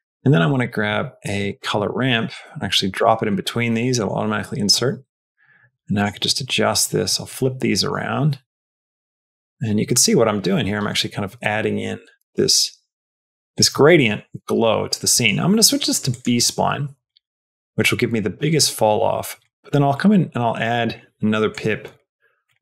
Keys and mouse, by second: 0.2 shift+a, 3.8 middle click, 4.6-5.9 drag, 6.5-7.7 drag, 8.4-13.5 drag, 15.1-16.1 drag, 17.0-19.3 drag, 19.8 click, 21.4 click.